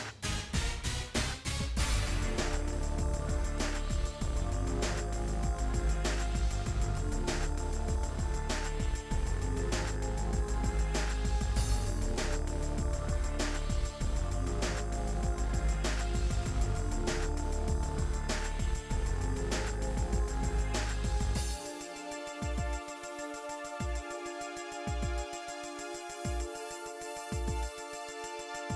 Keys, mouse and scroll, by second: 0.8 a, 0.9 right click, 2.6 click, 3.6 middle click, 3.8 scroll down 2, 3.9 middle click, 4.1 s, 5.1 KP_1, 5.3 KP_7, 5.5-6.0 scroll up 7, 5.8 shift+middle click, 6.0 shift+middle click, 6.4 s, 7.3-7.8 scroll down 8, 7.5 middle click, 7.8 shift+middle click, 8.4 click, 8.7 scroll up 1, 8.8 shift+middle click, 9.7 click, 10.9-12.2 drag, 12.2 scroll down 2, 14.1 click, 14.6 middle click, 14.9 scroll up 1, 15.1 middle click, 15.7 KP_1, 15.9 scroll up 4, 16.3 shift+middle click, 16.5 g, 17.4 middle click, 17.6-18.0 scroll down 5, 18.0 middle click, 19.5 click, 19.8 middle click, 20.7 click, 21.7 click, 22.2-23.5 middle drag, 23.5 click, 24.0 Tab, 24.6 Tab, 25.1 2, 25.2 click, 25.3 middle click, 25.6 shift+click, 25.9 f, 26.1 click, 26.2 middle click, 26.5 click, 27.4 middle click, 27.8 ctrl+b, 28.7 click.